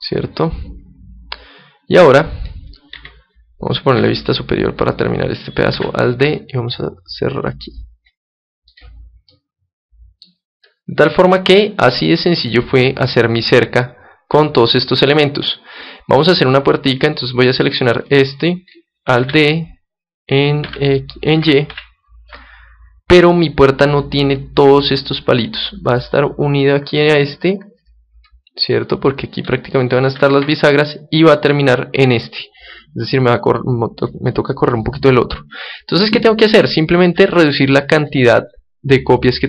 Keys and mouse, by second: 2.9 KP_3, 3.9 KP_7, 4.6-6.6 middle drag, 5.7 alt+d, 8.8-10.5 drag, 9.3-12.9 middle drag, 16.9-19.8 right drag, 19.2 alt+d, 27.5 click, 28.3 middle click, 29.1 click, 29.2-34.1 middle drag, 36.7 right click, 36.8-39.1 middle drag.